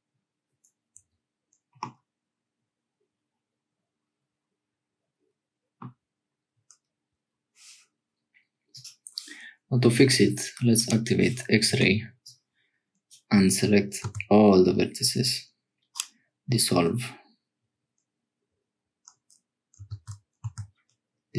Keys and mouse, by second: 1.8-5.8 drag, 10.8 click, 11.7 1, 12.2 click, 14.0 x, 20.0 ctrl+z, 20.4 x.